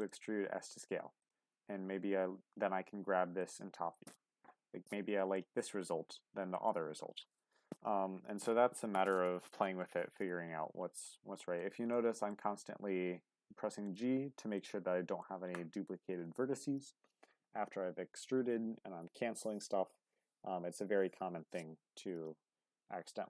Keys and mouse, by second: 0.3 s, 1.2 click, 1.5 g, 3.4 click, 5.3-6.7 middle drag, 8.2 ctrl+z, 9.3 ctrl+z, 10.3 g, 11.6 click, 12.0 middle click, 12.5 g, 13.8 click, 14.6 middle click.